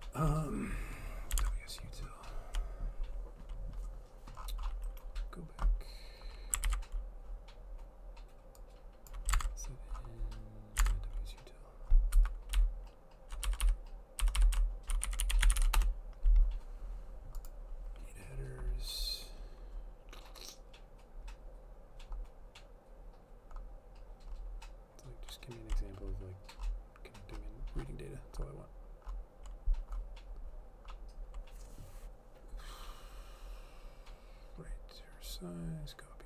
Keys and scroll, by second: 1.5 alt+Tab, 6.7 ctrl+f, 9.4 alt+Tab, 10.9 alt+Tab, 12.2-16.2 typing, 17.7-18.4 typing.